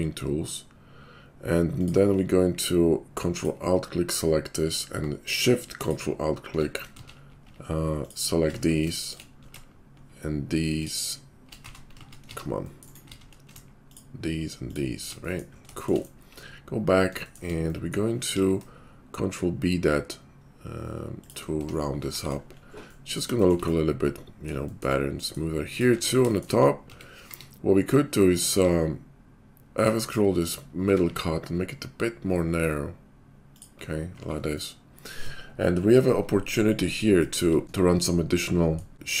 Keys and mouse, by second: 1.7 click, 1.8-3.2 ctrl+middle drag, 3.2 ctrl+alt+click, 3.3-5.0 ctrl+alt+middle drag, 6.5-7.5 ctrl+shift+middle drag, 6.9 ctrl+z, 8.4 ctrl+shift+middle click, 11.6 ctrl+x, 11.7 ctrl+z, 12.2 z, 12.8 middle click, 12.9 ctrl+click, 13.2 ctrl+z, 15.0-18.7 shift+drag, 16.6 /, 18.3 ctrl+b, 21.6 Tab, 22.1 shift+2, 23.2-39.2 shift+drag, 25.9 Tab, 26.9 Tab, 27.2 q, 28.5 q, 30.8 s, 34.2 shift+2.